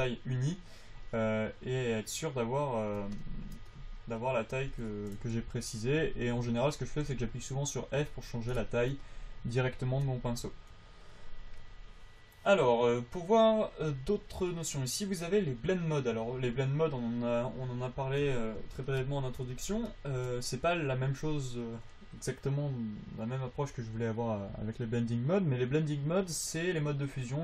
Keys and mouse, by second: 0.2 f, 1.2-3.5 drag, 6.3 f, 7.4 f, 8.3 f.